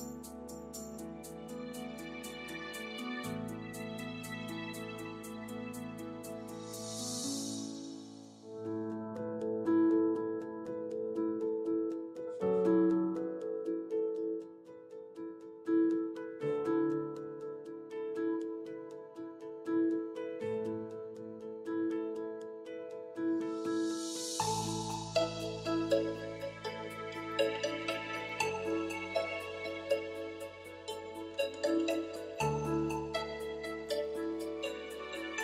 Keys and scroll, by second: 11.3-12.7 typing, 14.8-16.6 typing.